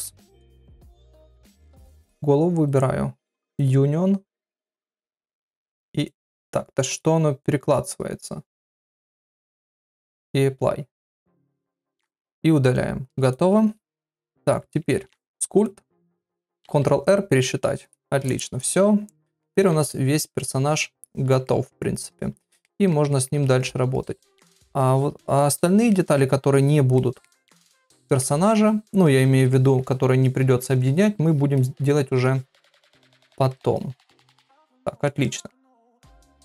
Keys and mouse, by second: 0.0 ctrl+KP_Subtract, 1.4 click, 2.6 click, 4.1 click, 9.5-10.9 drag, 11.7 click, 12.0 x, 13.2 click, 13.8 Tab, 14.3 Tab, 14.9 ctrl+Tab, 17.1 ctrl+r, 19.4 ctrl+middle click, 19.6 [, 19.7 [, 20.7 shift+click, 21.0 shift+click, 21.4 middle click, 22.1 shift+click, 22.6 middle click, 23.1 ctrl+middle click, 23.6 shift+click, 23.9 shift+click, 24.3 middle click, 24.9 shift+click, 25.2 shift+click, 25.6 shift+click, 25.9 middle click, 26.5 shift+click, 27.0 middle click, 27.8 shift+click, 28.2 middle click, 29.1 shift+click, 29.5 middle click, 30.2 shift+click, 30.6 middle click, 31.2 shift+click, 31.6 middle click, 32.3 shift+click, 32.9 middle click, 33.3 ctrl+middle click, 34.2 shift+click, 34.8 ctrl+middle click, 35.2 middle click, 35.7 ctrl+middle click, 36.3 shift+middle click.